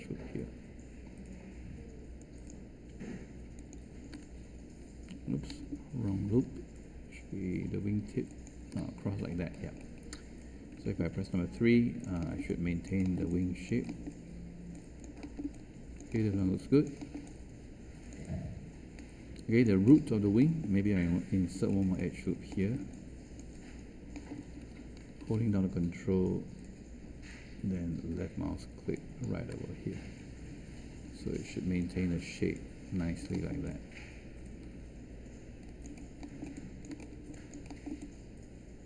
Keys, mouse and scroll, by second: 10.7 3, 21.3 1, 31.0 3.